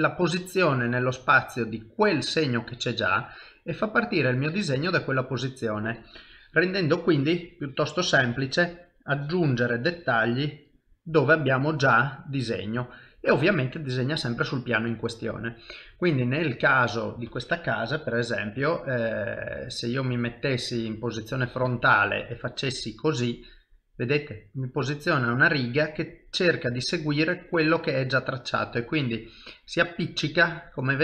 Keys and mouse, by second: 0.5 shift+middle click, 0.9 ctrl+middle click, 1.4 middle click, 2.5 click, 3.4 ctrl+middle click, 6.3 click, 9.2 click, 10.4 middle click, 12.9 shift+middle click, 14.6 middle click, 15.4 shift+middle click, 16.0 middle click, 19.2 middle click, 20.1 KP_7, 20.8 KP_1, 22.3 click, 23.3 middle click, 26.2 ctrl+middle click, 26.8 shift+middle click, 27.3 middle click, 30.4 middle click.